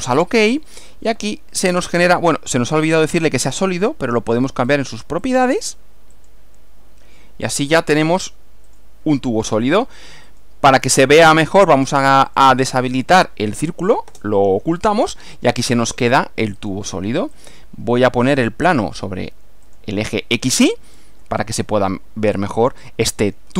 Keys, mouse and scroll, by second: 0.1 click, 2.8 click, 4.7 click, 5.2 click, 6.2 click, 7.8 click, 8.7 click, 10.3 click, 11.1 click, 12.3 click, 13.0 click, 14.1 space, 16.6 click, 17.4 click, 18.4 click, 19.7 click, 22.0-23.5 middle drag.